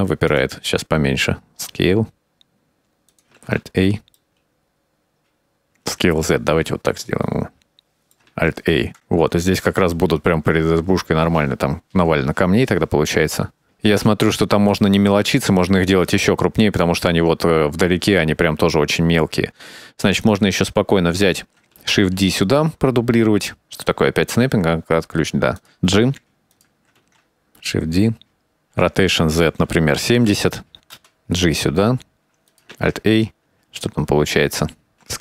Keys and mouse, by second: 0.6-1.0 right drag, 1.3 s, 3.4 alt+a, 3.7-4.6 middle drag, 5.5 click, 5.8 s, 8.5-9.3 middle drag, 9.1 alt+a, 9.7 KP_0, 11.9-16.6 drag, 17.4 shift+middle click, 20.6 right click, 22.2 shift+d, 24.1 s, 25.6 click, 26.1 g, 28.3 shift+d, 29.7 r, 31.5 g, 33.1 alt+a.